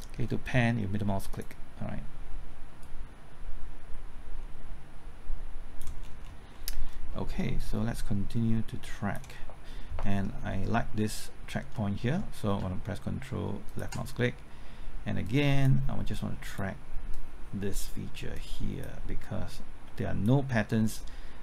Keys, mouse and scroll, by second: 1.3-6.0 drag, 6.0 scroll down 1, 6.5 middle click, 7.6-9.6 drag, 9.8 scroll up 1, 10.0 middle click, 10.3-10.7 scroll up 1, 10.7 middle click, 10.9-11.7 scroll up 1, 13.6 ctrl+click, 15.2 click, 18.3 click, 19.5-20.6 drag, 20.6 click.